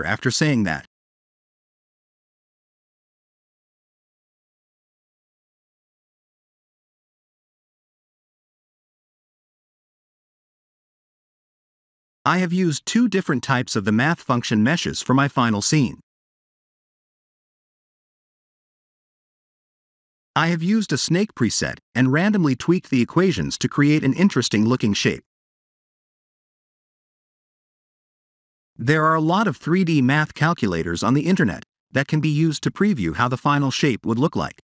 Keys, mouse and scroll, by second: 2.0 click, 2.4 click, 2.8 click, 3.4 middle click, 8.5 click, 9.2 b, 9.9 x, 11.1 shift+a, 15.3-16.7 scroll down 6, 16.7 middle click, 19.2 click, 22.1 middle click, 27.4 click, 32.8 click.